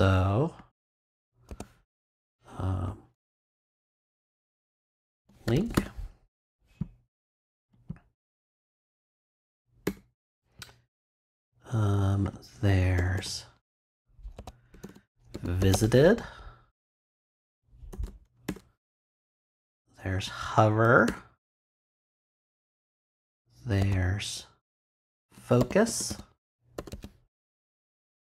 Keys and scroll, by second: 1.4 a, 3.1 shift+l, 3.6 shift+BackSpace, 4.9-6.2 typing, 8.9 shift+[, 9.8 shift+Return, 14.3-16.2 typing, 17.9 shift+[, 18.4 shift+Return, 19.0 Return, 20.8 Return, 23.8-28.2 typing.